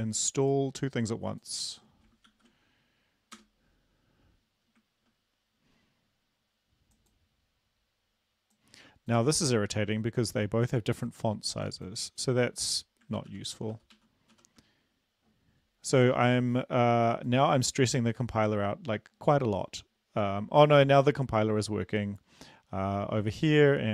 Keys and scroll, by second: 2.8 ctrl+v, 3.9 Return, 14.0 ctrl+-, 14.4 ctrl+-, 14.9 ctrl+-.